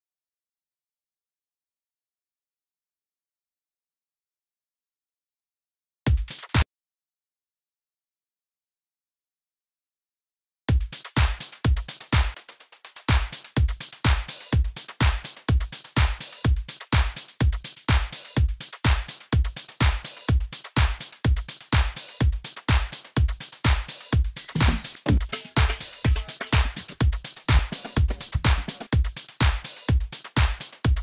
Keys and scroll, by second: 0.2-1.7 typing, 2.8 super+i, 2.9 super+Left, 3.7 super+Right, 6.0 s, 6.6 space, 10.5 alt+s, 11.2 s, 18.4 shift+x, 19.6 Left, 20.4 Up, 22.5 Up, 23.3 Right, 23.6 Down, 24.9 Down, 26.6 Down, 28.8 Left, 29.2 Up, 29.5 Left, 30.8 Down.